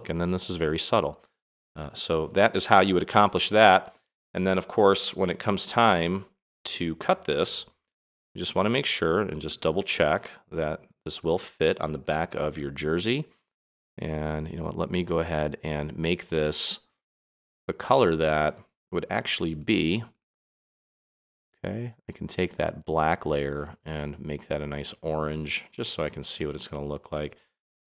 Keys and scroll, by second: 7.8 super+-.